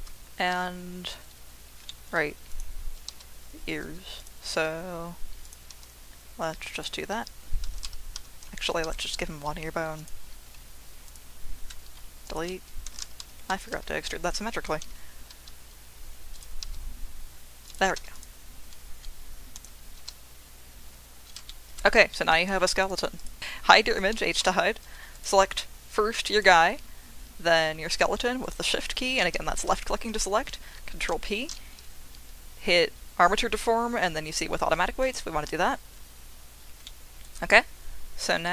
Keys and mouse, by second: 1.9 shift+click, 3.1 e, 4.2 click, 4.5 e, 5.4 click, 6.7 click, 6.7 e, 7.8 ctrl+z, 10.0 click, 10.0 e, 10.4 3, 12.9 Delete, 13.0 ctrl+z, 14.8 shift+e, 16.3 click, 16.6 e, 17.6 click, 17.9 3, 18.1 click, 18.9 Delete, 21.5 shift+click, 22.1 shift+click, 22.9 click, 23.4 ctrl+z, 23.4 h, 24.4 h, 25.0 ctrl+p, 26.4-27.6 drag, 28.5 shift+click, 30.8 ctrl+p, 36.8-37.2 middle drag.